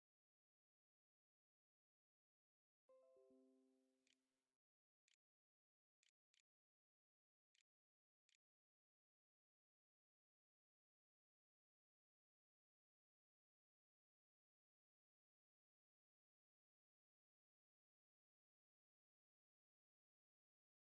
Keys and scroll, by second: 2.8-8.6 typing, 10.9 q.